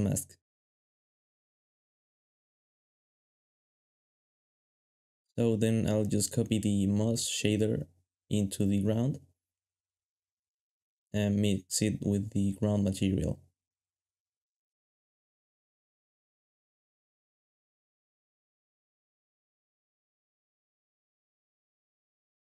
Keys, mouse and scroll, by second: 2.6 g, 4.0 g, 10.8-11.5 typing, 12.7 ctrl+c, 13.8 ctrl+v, 13.8 g, 14.4 ctrl+shift+right click, 14.6 ctrl+shift+g, 15.7 ctrl+shift+click, 16.4 shift+middle click.